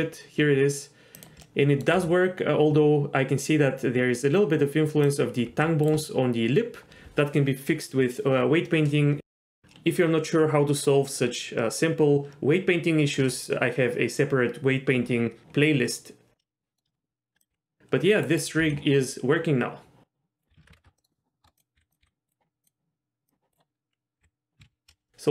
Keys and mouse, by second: 1.2 click, 1.4-1.8 middle drag, 1.9 g, 5.1 click, 5.5 g, 9.6 g, 16.7 middle drag, 16.9 shift+middle click, 17.4 click, 17.5 g, 18.3 right click, 18.6 g, 20.4 right click, 20.5 a, 20.7 alt+r, 20.7 alt+g, 20.8 Tab, 21.0 middle click, 21.4 Tab, 21.6 click, 21.7 s, 22.0 s, 23.3 click, 24.2 h, 24.6 ctrl+z, 24.9 n.